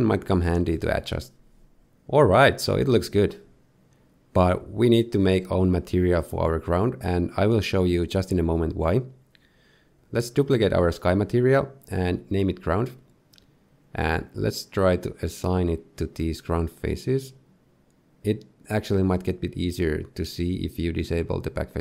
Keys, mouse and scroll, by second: 0.0 shift+middle click, 0.5 shift+click, 6.9 click, 7.7 click, 8.0 click, 9.7 click, 10.3 click, 14.0-14.9 scroll down 1, 14.9 middle click, 15.8 Tab, 16.2 middle click, 16.6 z, 17.5 click, 18.9 click.